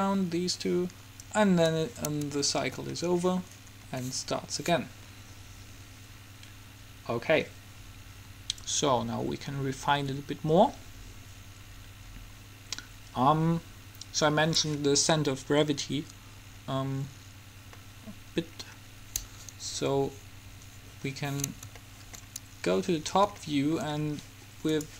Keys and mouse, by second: 1.4-2.6 drag, 2.6 middle click, 8.8 click, 18.0-19.6 middle drag, 20.5 KP_7.